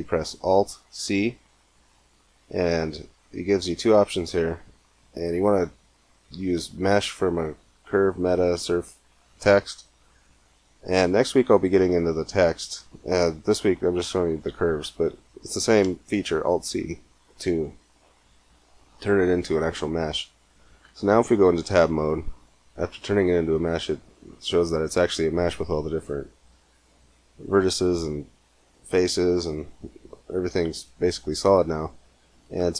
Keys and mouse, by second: 0.8 alt+c, 18.0 middle click, 18.8 middle click, 19.0 middle click, 20.5 Tab, 24.9-27.0 middle drag, 28.1 middle click, 28.4-29.5 middle drag, 30.9 Tab, 31.9 Tab.